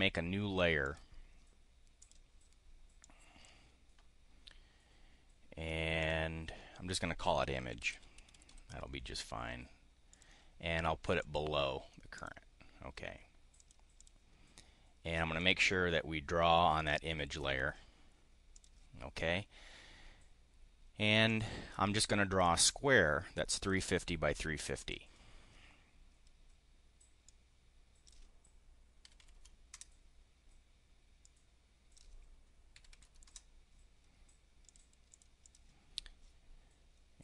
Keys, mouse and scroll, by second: 0.8 click, 2.0 click, 3.0 click, 6.0 click, 7.5-8.9 typing, 10.0 click, 11.2 click, 12.2 click, 13.5 click, 13.8 click, 15.3 click, 16.7 click, 17.2 click, 18.4 click, 21.2 click, 22.4-23.5 drag, 24.8 click, 27.2-28.1 drag, 29.0 3, 29.3 0, 29.7 Return, 31.2 click, 32.8 3, 33.1 0, 34.7 click, 35.2 click.